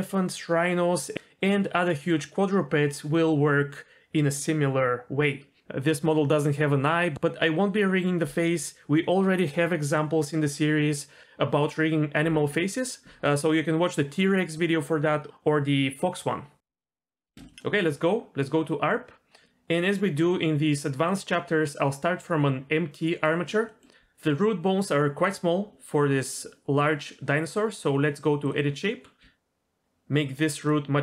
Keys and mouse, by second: 17.0 middle click, 17.3 shift+middle click, 17.5 middle click, 21.2-23.4 drag, 23.6 middle drag, 28.4 click, 29.2 s.